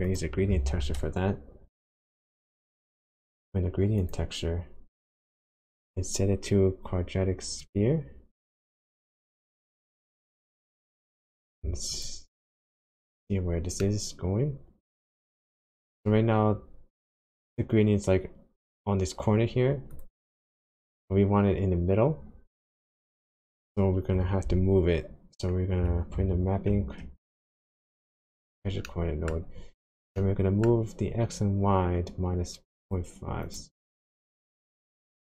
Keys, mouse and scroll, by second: 0.1 click, 0.6 shift+a, 6.0-6.8 scroll up 7, 7.6 click, 9.4 click, 9.7-10.4 scroll down 5, 10.4 middle click, 11.0 scroll up 1, 12.0 ctrl+shift+click, 13.8 middle click, 15.2-15.5 scroll up 1, 19.9 click, 23.3 click, 26.2 ctrl+t, 28.8 middle click, 29.5-30.1 scroll up 7, 30.2 middle click, 31.1 scroll down 1, 32.8 click, 33.5 click, 34.0 click, 34.7 click.